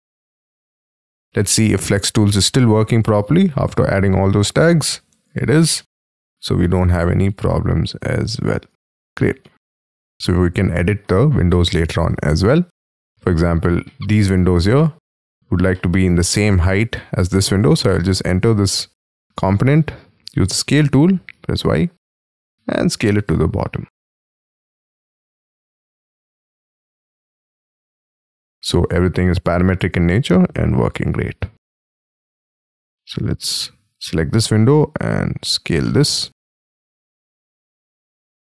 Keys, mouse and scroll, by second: 1.1-1.7 scroll up 11, 2.1 double click, 2.4 middle click, 3.5 m, 3.7 scroll up 3, 5.3 ctrl+z, 5.7 middle click, 5.9 ctrl+z, 6.2 middle click, 6.8 middle click, 6.8 space, 7.3 m, 8.2 double click, 8.7 ctrl+z, 9.0-9.4 scroll down 5, 9.4 shift+middle click, 11.1-11.5 scroll down 1, 11.5 middle click, 11.8 space, 12.0 Escape, 12.6 Escape, 13.6 scroll up 6, 13.8 middle click, 15.7 middle click, 17.8 double click, 18.1 double click, 18.6-19.5 scroll up 9, 19.5 s, 21.3 y, 28.1 y, 28.4 space, 28.5 y, 28.6-29.2 scroll down 8, 29.2-29.9 scroll up 2, 29.9 scroll up 3, 30.1 s, 33.5 space, 34.3 s, 35.8 middle click.